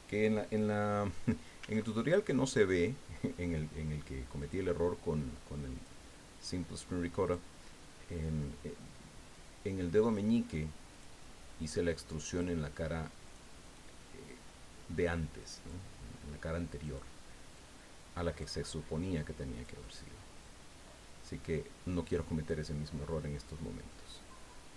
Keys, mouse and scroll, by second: 1.6 s, 4.4 click, 5.7 click, 7.2 right click, 8.1 click, 9.0 scroll down 1, 9.5 scroll down 1, 10.9 right click, 11.6 click, 13.2 right click, 13.7 click, 14.5-15.3 scroll up 2, 16.8 right click, 17.5-18.6 drag, 19.5 click, 19.8 right click, 20.4 click, 20.8-21.3 scroll up 1, 21.4 scroll up 2, 23.2 click.